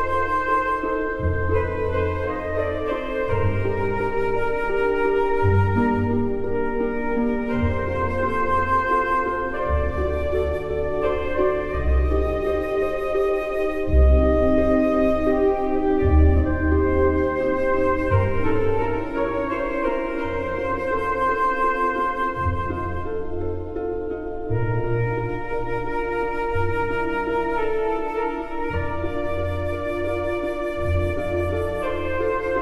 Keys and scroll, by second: 31.1 ctrl+z.